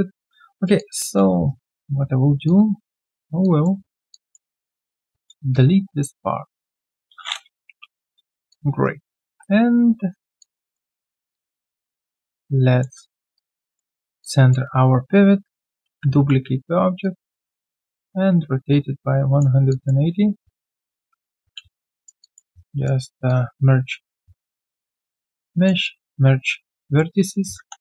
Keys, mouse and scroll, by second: 0.5 alt+right click, 0.7 alt+click, 1.4 right click, 1.4 q, 3.4 alt+click, 4.1 alt+click, 4.6 ctrl+click, 5.5 alt+click, 7.7 Delete, 8.5 alt+click, 8.8 right click, 8.8 q, 9.2 w, 10.4 alt+click, 11.0 alt+right click, 11.3 alt+click, 12.1 middle click, 12.5-13.3 typing, 13.3 alt+right click, 13.6 alt+click, 14.2 alt+click, 19.7 alt+click, 20.6 alt+q, 20.8 shift+click, 21.3 ctrl+alt+c, 21.5 ctrl+alt+q, 21.8 alt+right click, 22.2 alt+click, 22.5 right click, 24.0 shift+right click, 25.4 alt+middle click, 25.8 alt+click, 27.1 alt+right click.